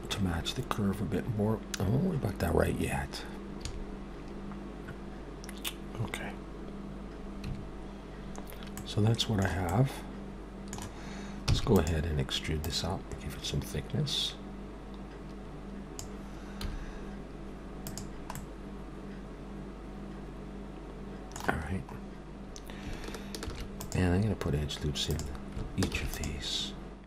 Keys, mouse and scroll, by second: 3.5 a, 7.6 3, 8.7 middle click, 9.7 middle click, 11.5 e, 12.6 click, 16.6 z, 18.4 middle click, 21.8-22.4 scroll up 1, 23.5 ctrl+r, 25.9 ctrl+r.